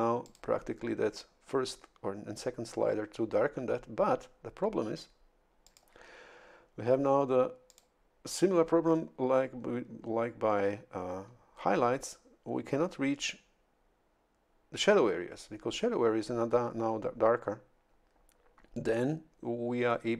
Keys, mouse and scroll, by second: 0.2 click, 5.6 click, 7.7 click.